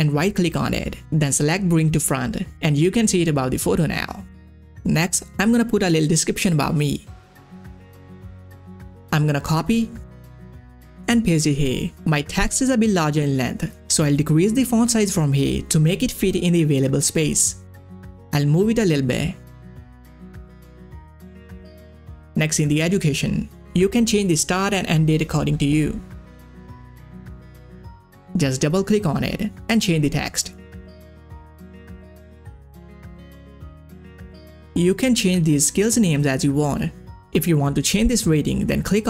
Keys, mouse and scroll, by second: 1.5 click, 4.3 click, 4.3 scroll down 1, 4.9 scroll down 1, 6.6 click, 7.0 scroll up 1, 8.2 click, 9.0 ctrl+a, 10.0 ctrl+c, 10.8 click, 11.3 ctrl+a, 11.4 ctrl+v, 14.0 ctrl+v, 14.0-20.1 drag, 20.8 scroll down 1, 21.7 ctrl+scroll up 1, 22.2 click, 23.1 shift+Left, 23.3-24.0 typing, 24.8 shift+Right, 25.1-25.8 typing, 26.4 click, 27.0 scroll down 1, 28.0 click, 28.2 shift+Left, 28.4-30.5 typing, 31.3 click, 32.6-33.0 ctrl+scroll down 2, 34.7 ctrl+scroll up 1, 38.3 ctrl+scroll up 1, 38.4 click.